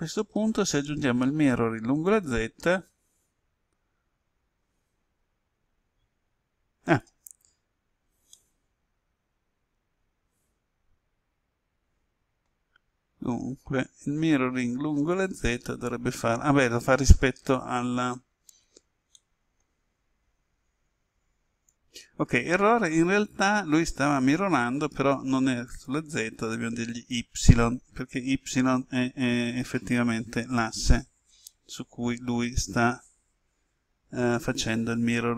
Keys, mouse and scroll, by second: 7.7 scroll down 1, 8.3-12.9 middle drag, 13.0-14.3 scroll up 1, 17.4 Tab, 19.1 middle click, 21.8 click, 23.0 KP_1, 25.6-28.0 drag.